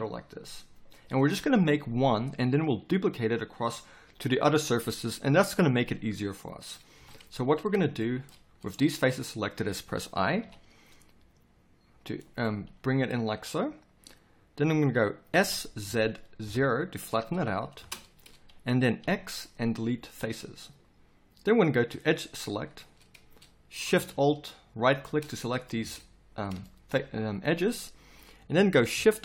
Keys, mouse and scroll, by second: 6.9 KP_7, 10.5 i, 12.6 middle click, 13.9-15.3 middle drag, 15.3 s, 19.0 x, 22.6-25.7 middle drag, 25.7 z.